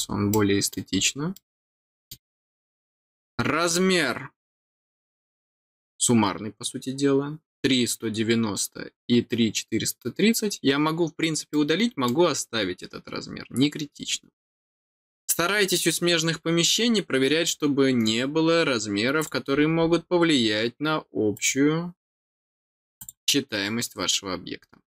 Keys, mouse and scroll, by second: 0.3 middle click, 1.0 scroll down 1, 1.3 middle click, 11.5 middle click, 12.7 scroll down 1, 13.9 scroll down 1, 19.1 click, 19.5-19.9 scroll up 2, 20.3 scroll up 1, 21.3 click, 22.9 click, 24.5 scroll down 1.